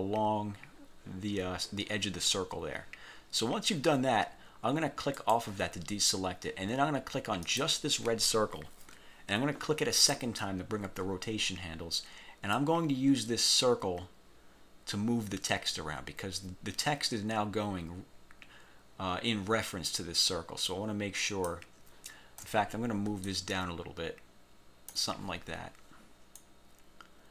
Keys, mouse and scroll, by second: 5.3 click, 7.6 click, 10.1 click, 12.6-21.8 drag, 23.4 ctrl+click, 26.4 click.